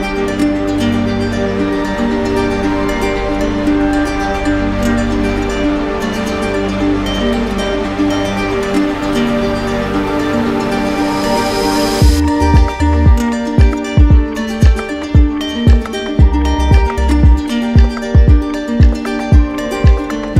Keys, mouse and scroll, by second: 0.4 click, 1.1 alt+click, 2.2 right click, 7.4 click, 8.5 click, 10.2 click, 10.7 click, 12.4 click, 13.3 click, 19.4 click.